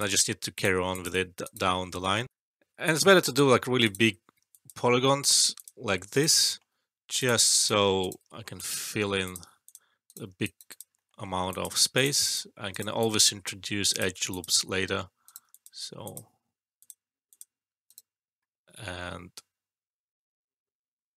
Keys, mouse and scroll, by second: 0.5 click, 1.3 right click, 2.8 alt+click, 3.8 right click, 4.5 alt+click, 6.1 right click, 6.4 alt+middle click, 7.1 click, 8.0 right click, 8.3 alt+middle click, 8.6 alt+click, 10.0 right click, 10.4 alt+right click, 10.6 alt+click, 10.9 alt+middle click, 11.5 alt+click, 12.7 right click, 12.9 alt+click, 15.2 right click, 15.4 alt+click, 15.8 alt+middle click, 16.0 alt+click, 17.8 right click.